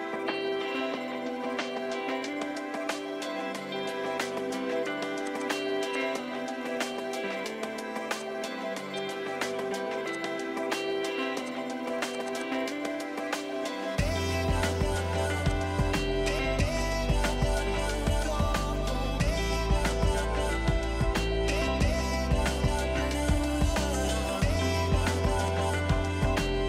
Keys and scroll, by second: 4.5 r, 7.0 r, 9.6 p, 11.6 space, 13.6 ctrl+g, 14.2 m, 21.1-21.8 typing, 22.0 Return, 26.4 Delete.